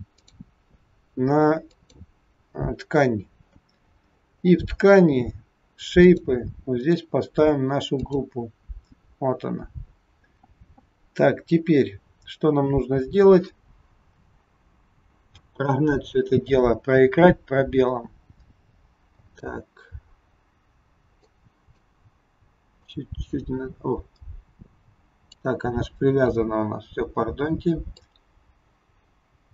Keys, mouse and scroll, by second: 0.1 click, 3.4-5.3 scroll down 28, 6.0 click, 6.9 click, 14.0-15.2 scroll down 2, 15.2 scroll down 1, 15.2 space, 19.2 space, 21.1 click, 22.7 click, 28.0 click.